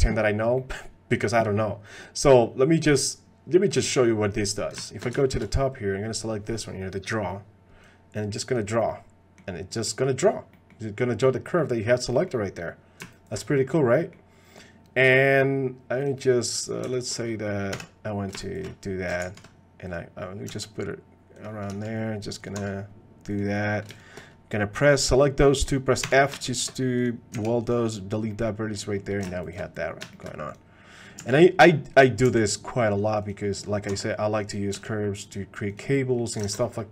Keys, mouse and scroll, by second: 0.6 click, 5.2 shift+click, 7.8 click, 8.9 middle click, 9.7 middle click, 10.5 middle click, 11.5 middle click, 12.1 middle click, 13.5 middle click, 14.0 middle click, 14.6 click, 16.0 click, 17.7 f, 19.2 ctrl+z, 20.5 g, 21.7 s, 22.6 r, 25.2 click, 26.0 f, 27.3 x, 28.3 click, 28.7 click, 30.1 shift+click, 30.5 click, 31.2 g, 32.0 click, 32.2 g, 33.9 r, 34.7 g, 35.9 click, 36.5 ctrl+Tab, 36.6 click.